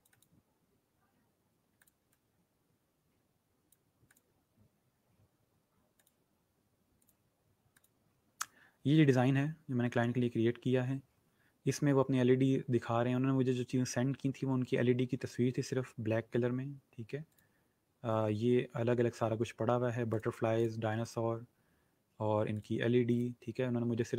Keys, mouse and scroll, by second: 6.6 click, 17.2 click, 20.0 click.